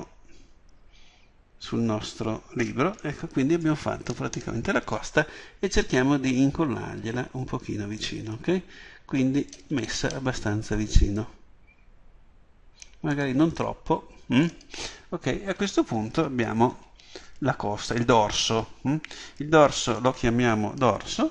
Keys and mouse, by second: 6.0-7.7 drag, 7.7 middle click, 11.2-13.1 drag, 19.9-21.3 drag.